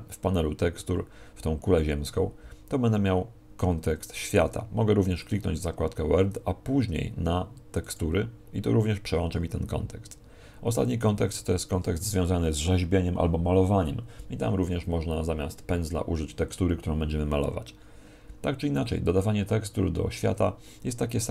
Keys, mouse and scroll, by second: 5.2 click, 7.8 click.